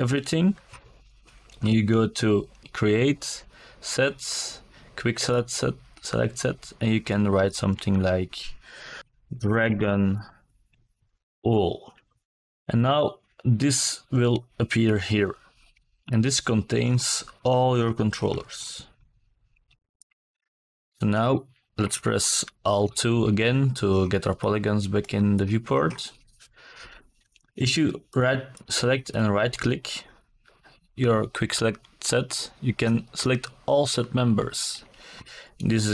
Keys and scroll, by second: 5.5-8.3 typing, 19.4 alt+KP_2.